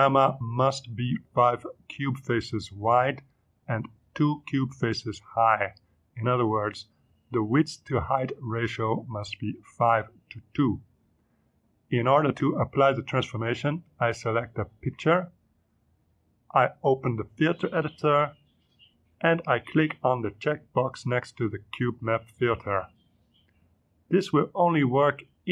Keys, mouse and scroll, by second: 16.9 click, 18.0 click, 19.4 click, 22.6 click, 24.0 click.